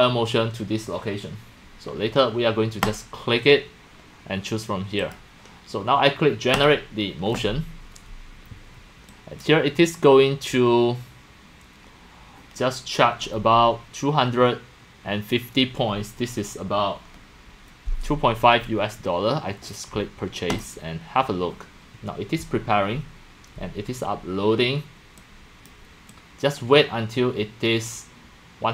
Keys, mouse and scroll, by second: 2.8 click, 4.3 drag, 5.0 click, 6.5 click, 9.1 click, 12.7-14.5 drag, 20.5 click, 25.2-25.7 drag, 26.1-26.5 drag.